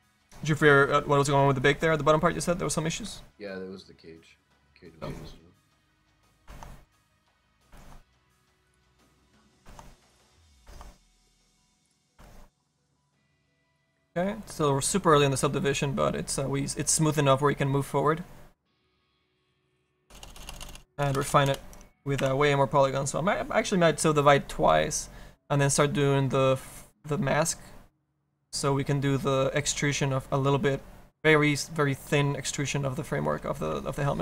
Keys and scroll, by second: 19.9 BackSpace, 20.5 BackSpace, 20.9 BackSpace.